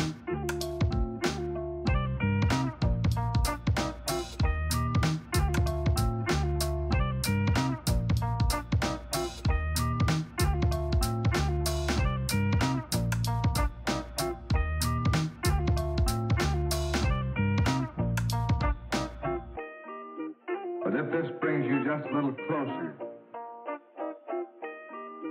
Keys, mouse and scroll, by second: 0.4 Tab, 0.5 a, 1.0 click, 1.3 shift+middle click, 1.5 a, 1.9 click, 2.3 middle click, 2.7 a, 3.1 click, 3.9-5.3 shift+middle drag, 4.8 Tab, 5.3 click, 5.5 middle click, 5.8 Tab, 5.9 a, 6.3 click, 6.8-8.0 middle drag, 7.5 a, 8.0-9.3 drag, 9.3 middle click, 10.7 a, 11.0 scroll up 1, 11.1 middle click, 11.6 middle click, 11.8 click, 12.7-13.9 middle drag, 13.0 Tab, 13.0-13.7 scroll up 4, 13.7 scroll down 2, 13.9 click, 14.2 middle click, 14.4 click, 14.6 middle click, 14.8 click, 14.8 middle click, 15.2-16.8 middle drag, 15.4 scroll up 2, 16.3 a, 16.8 click, 17.8-18.9 middle drag, 18.2 a, 18.9 click, 19.5 Tab, 19.5-21.0 shift+middle drag, 20.4 Tab, 20.4 a, 21.0-22.7 drag, 22.7-24.3 middle drag, 23.6 a, 24.3 click, 25.1 Tab, 25.1-25.3 middle drag.